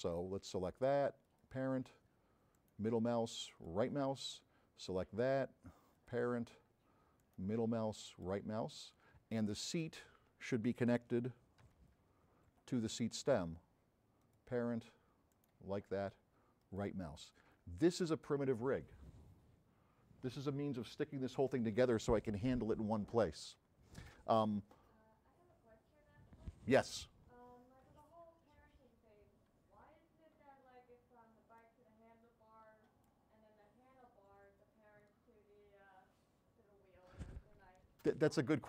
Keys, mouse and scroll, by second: 1.3 click, 2.6 middle click, 4.9 click, 6.0 click, 7.3 middle click, 8.2 right click, 8.8 scroll down 3, 9.7 click, 11.8 f, 14.3 click, 15.4 middle click, 16.6 right click, 31.6-33.3 drag, 33.6-34.2 scroll down 4.